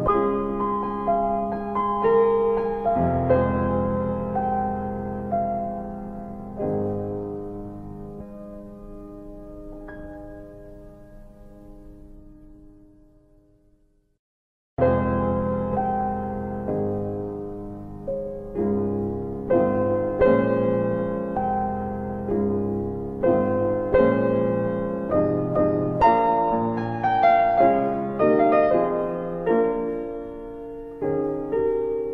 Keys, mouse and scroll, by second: 0.0 Return, 1.6 click, 4.2 click, 6.1 click, 8.7 click, 11.8 middle click, 12.8 alt+middle click, 14.1 click, 14.9-15.3 scroll up 1, 15.3 middle click, 18.1 click, 19.7 alt+i, 22.9 alt+click, 23.4 alt+middle click, 23.9 middle click, 24.8 alt+middle click, 26.1 alt+click, 26.8 alt+middle click, 27.8 click, 28.6 alt+middle click, 30.2 click, 31.6 alt+middle click.